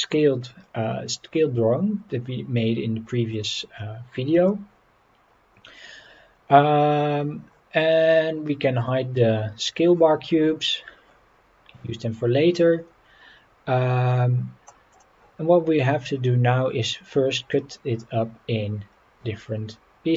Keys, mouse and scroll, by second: 3.3-3.8 drag, 4.4 Delete, 8.7 click, 9.6 click, 14.9 click.